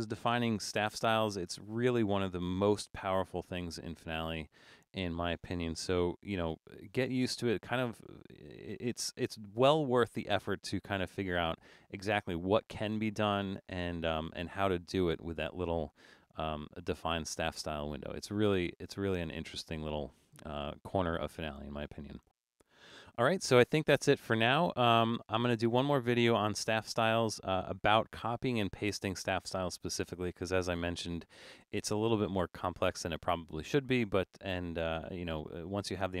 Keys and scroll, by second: 4.4 super+=, 6.1 super+-, 6.6 super+-, 7.2 super+-.